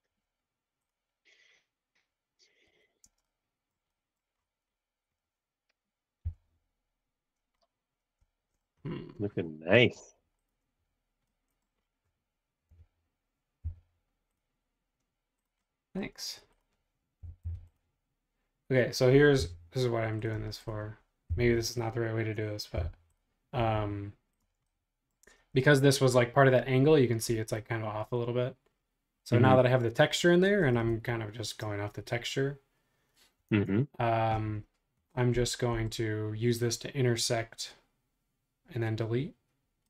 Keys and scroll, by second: 2.6 Escape, 3.0 space, 6.2 l, 9.9 space, 12.7 r, 13.6 Left, 16.2-18.0 typing, 20.3 shift+space, 21.3 Left, 22.7 m, 23.6 Right, 24.5 space, 30.9 super+Tab, 33.5 super+Tab.